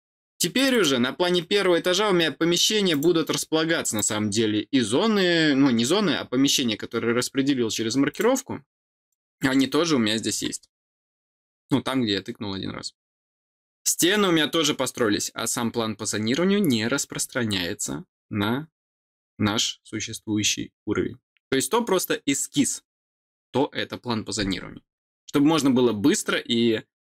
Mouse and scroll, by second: 0.5 click, 1.7 scroll up 2, 2.8 click, 3.9 click, 8.0 click, 8.9 click.